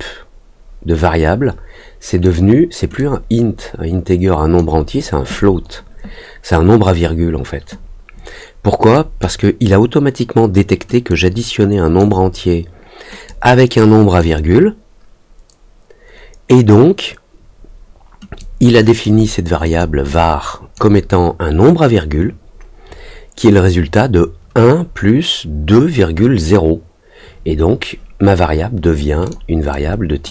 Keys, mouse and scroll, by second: 2.2 click, 2.9-4.5 drag, 8.9 click, 11.0 click, 13.2 click, 18.3 click, 19.6 click, 20.1 click, 29.2 click, 29.7 click.